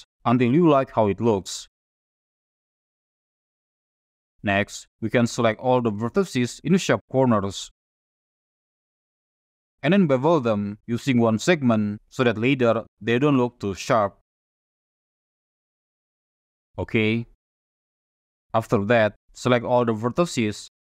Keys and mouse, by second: 0.7-2.0 drag, 4.1 click, 6.5 click, 7.3 shift+click, 8.3 shift+click, 8.9 shift+click, 10.6 ctrl+shift+b, 15.0 click, 17.8 click, 19.1 shift+click, 20.3 a.